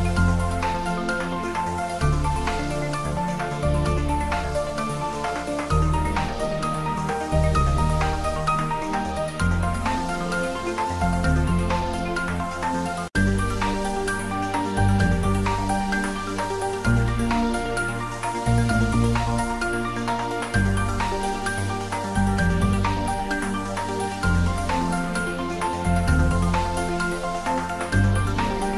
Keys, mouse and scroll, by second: 0.3 middle click, 0.6 right click, 1.2 click, 1.8 middle click, 2.6 ctrl+z, 3.1 scroll down 1, 4.5 click, 5.4-5.7 scroll down 1, 5.7 click, 8.0 scroll up 1, 9.8 scroll down 1, 10.7 click, 12.4 click, 13.3-13.7 typing, 14.1 click, 14.7 ctrl+z, 15.4 scroll up 1, 17.1 click, 21.1 r, 24.8 Right, 25.4 click, 26.2 s, 26.9 click, 27.2 g, 28.6 click.